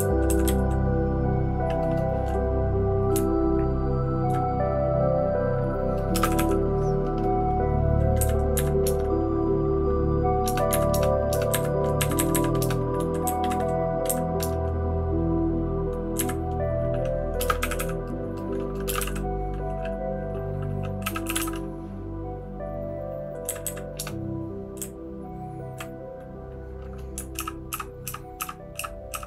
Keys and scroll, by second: 0.1 Down, 0.3 Down, 0.4 Down, 3.1 Up, 3.6-4.1 Up, 6.1 typing, 8.2 Up, 8.5 Up, 8.8 Return, 10.4 Return, 10.7 Up, 10.9 Return, 11.5 Up, 12.0 Up, 12.2 Up, 12.3 Up, 12.6 Return, 13.2 Down, 13.4 Down, 14.1 Up, 14.4 Return, 16.1 Up, 17.4-19.5 typing, 17.7 Up, 20.8-21.9 typing, 23.4 Down, 23.6 Down, 24.2 Return, 24.8 Down, 25.3-25.7 Down, 25.3 typing, 27.3-29.2 typing.